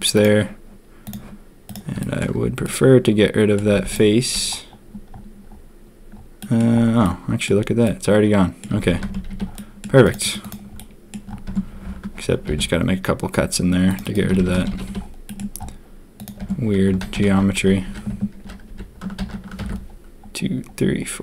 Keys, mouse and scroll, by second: 1.9 click, 2.6 click, 3.7 z, 6.3 click, 7.0 click, 7.8 click, 8.7 a, 8.8 a, 9.0 Tab, 9.1 a, 9.2 a, 9.5 drag, 10.0 click, 10.7-11.1 drag, 11.4 Tab, 12.4 ctrl+r, 14.1 a, 14.3 a, 14.5 Tab, 14.7 a, 14.8 a, 15.2 click, 16.3 Tab, 17.0 ctrl+z, 17.3 ctrl+z, 17.8 ctrl+z, 19.5 ctrl+r.